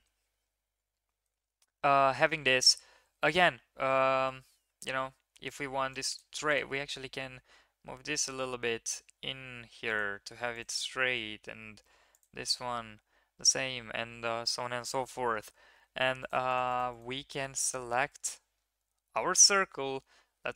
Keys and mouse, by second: 0.5 ctrl+KP_3, 4.6 1, 6.0 click, 6.8 g, 10.5 click, 10.7 g, 15.7 3, 16.2 click, 16.5 shift+click, 17.1 middle click, 17.7 shift+middle click, 17.9 middle click.